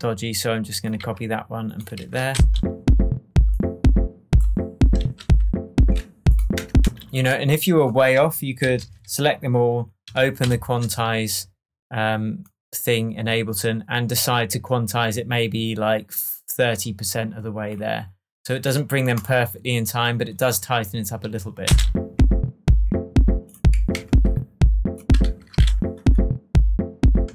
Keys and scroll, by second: 1.0 super+c, 1.9 super+v, 2.3 super+space, 5.1 super+j, 6.5 BackSpace, 6.8 space, 8.6 super+a, 10.4 shift+super+u, 21.6 space, 23.9 shift+Tab, 25.2 super+d, 27.2 space.